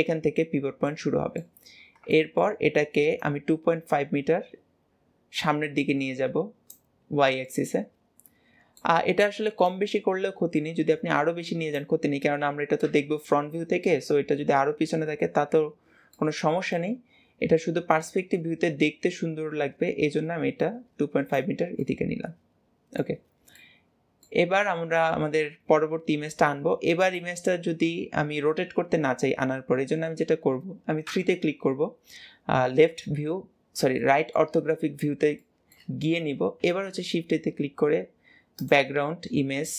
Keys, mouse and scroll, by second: 0.7 middle click, 1.6-2.0 scroll up 1, 2.0-3.1 shift+middle drag, 3.1 click, 7.3-9.6 middle drag, 9.6 click, 12.3 KP_3, 16.0-17.8 middle drag, 17.8 click, 21.6-23.2 middle drag, 23.2 scroll down 2, 23.4-27.7 middle drag, 30.9 KP_3, 33.8-34.5 shift+middle drag, 34.5-35.3 scroll up 3, 35.3-35.8 shift+middle drag, 35.8-36.5 scroll down 3, 36.5 shift+a.